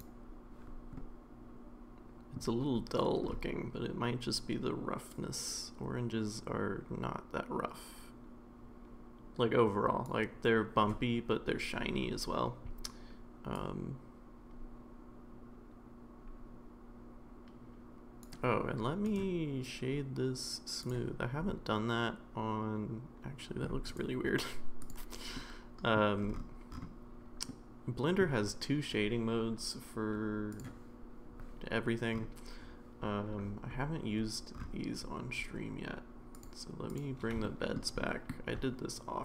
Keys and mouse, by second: 1.0-2.4 middle drag, 5.3-10.1 drag, 13.7-18.2 drag, 19.0-20.9 right drag, 21.5-23.6 middle drag, 24.0-24.9 right drag, 25.4-25.9 middle drag, 27.5-28.2 middle drag, 36.4 click, 36.9 click, 37.4 shift+middle click, 38.0 shift+middle click.